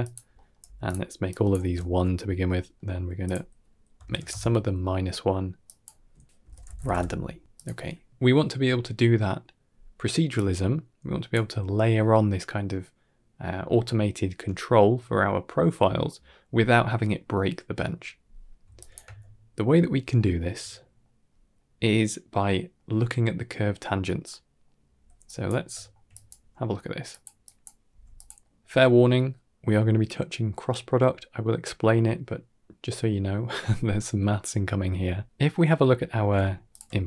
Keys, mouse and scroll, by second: 0.2 middle click, 0.5 g, 1.2 click, 2.3 scroll up 2, 2.6 middle drag, 3.1-5.4 drag, 5.7-8.1 drag, 10.2-11.2 drag, 11.3 middle click, 12.6-12.9 middle drag, 18.6 click, 18.9 x, 19.4-20.0 scroll down 4, 20.0 shift+middle drag, 20.6 middle drag, 22.3 middle click, 24.5 middle click, 25.1 click, 25.6 shift+middle click, 26.2 click, 26.4 g, 27.3 click, 27.7 g, 28.3 middle click, 34.3 middle click, 34.8 middle click, 35.6-36.1 middle drag, 36.6 alt+shift+click.